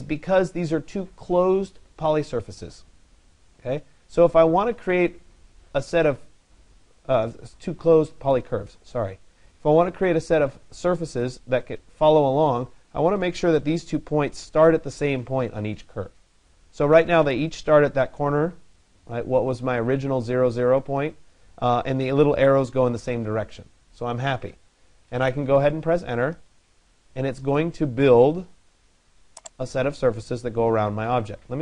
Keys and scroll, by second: 26.0 Return.